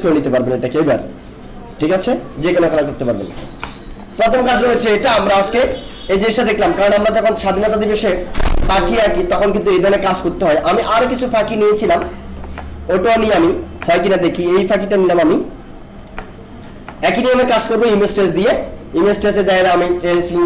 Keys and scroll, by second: 5.3 ctrl+-, 8.4 alt+space.